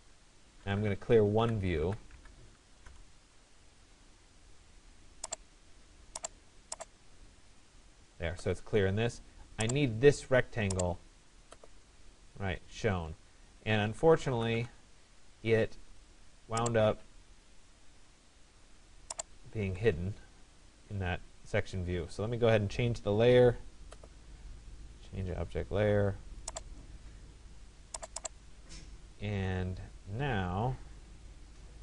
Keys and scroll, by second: 0.0 l, 1.5 Down, 2.9 Return, 14.2 Return, 19.3 Escape.